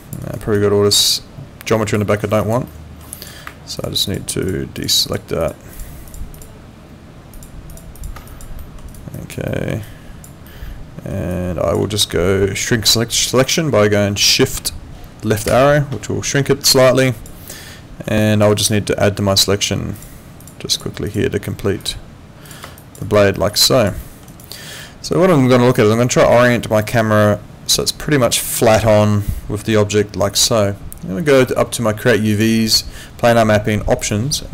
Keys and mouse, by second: 0.2 alt+right click, 0.5 alt+click, 2.4 alt+click, 2.6 alt+middle click, 3.1 alt+click, 3.8 ctrl+click, 8.3 alt+click, 8.6 alt+middle click, 8.9 alt+right click, 9.1 alt+click, 9.5 alt+middle click, 9.8 alt+click, 10.5 alt+middle click, 11.3 alt+click, 15.5 shift+,, 16.7 alt+click, 17.5 alt+middle click, 18.2 alt+click, 18.5 alt+right click, 19.9 shift+click, 22.8 alt+click, 23.0 alt+right click, 23.3 alt+middle click, 23.6 alt+click, 24.0 alt+middle click, 24.3 alt+right click, 24.6 alt+click, 29.7 alt+middle click, 32.3 click, 34.0 click.